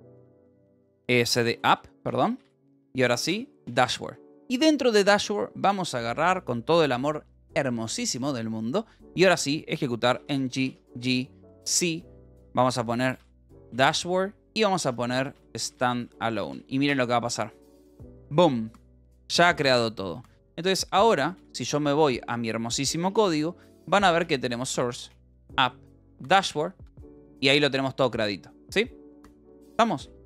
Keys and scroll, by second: 1.0-3.0 typing, 3.3 Tab, 3.7 Return, 10.2-11.6 typing, 12.8-17.2 typing, 20.5 Up, 21.4 ctrl+z.